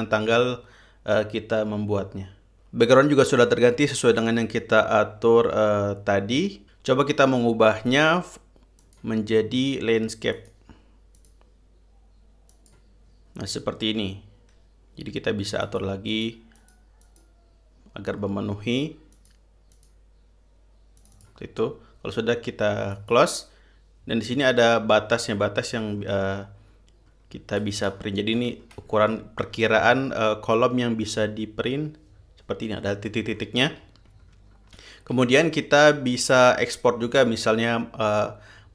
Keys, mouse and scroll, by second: 8.3-8.9 drag, 9.4-9.9 drag, 10.9 click, 11.7 click, 13.1 click, 16.2 click, 16.7 click, 17.1 click, 17.6 click, 19.7 click, 20.3 click, 21.6 click, 23.5 click, 26.2-26.7 scroll down 4, 27.2-28.1 ctrl+scroll down 6, 28.5 ctrl+scroll down 2, 29.2 ctrl+scroll down 2, 29.5 ctrl+scroll up 2, 30.1-30.4 scroll down 2, 33.9-35.3 scroll up 7, 35.9 ctrl+scroll up 2, 36.7 scroll up 2, 37.6-38.3 drag.